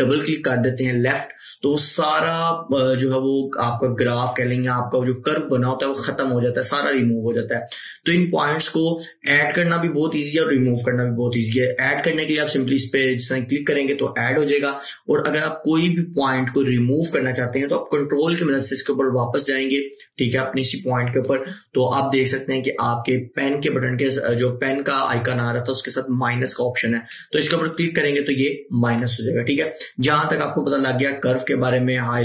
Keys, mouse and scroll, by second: 0.1 click, 14.0 click, 16.7 click, 27.9 ctrl+click, 29.0 typing.